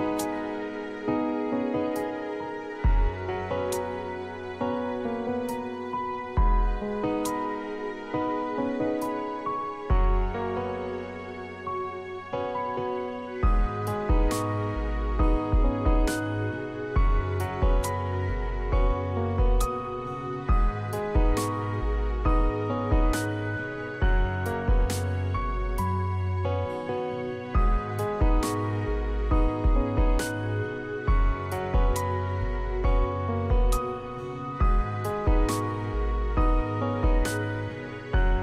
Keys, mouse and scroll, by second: 33.2 v, 33.7 v, 33.9 v.